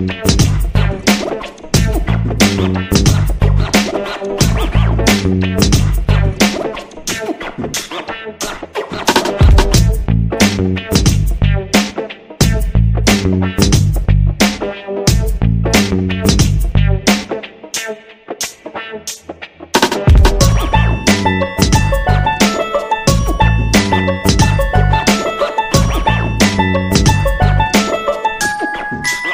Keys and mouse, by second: 0.8 g, 2.5 right click, 2.7 g, 3.8 shift+middle click, 4.5 ctrl+r, 6.3 right click, 6.6 g, 8.3 g, 10.2 right click, 11.6 right click, 11.9 g, 13.4-13.8 shift+middle drag, 14.3 ctrl+r, 15.6 g, 17.0 right click, 18.8 shift+right click, 19.4 f, 20.7 k, 23.4 right click, 23.9 g, 25.5 right click, 25.8 g, 26.7 right click, 26.8 g, 28.1 right click, 28.3 KP_1, 29.0 alt+z.